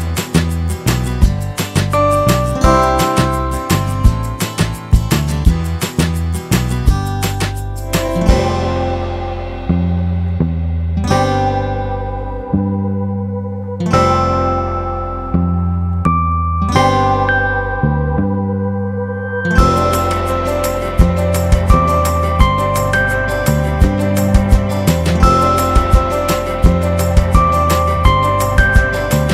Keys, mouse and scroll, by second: 0.3 scroll up 1, 3.0 shift+click, 7.9 click, 9.1 shift+click, 13.4 click, 14.6 click, 15.0 click, 15.6 click, 16.7 click, 17.1 click, 18.5 click, 19.6 click, 20.2 F3, 21.5 alt+middle click, 22.5 click, 22.9 z, 23.3 middle click, 23.5 scroll down 1, 28.9 alt+scroll down 1.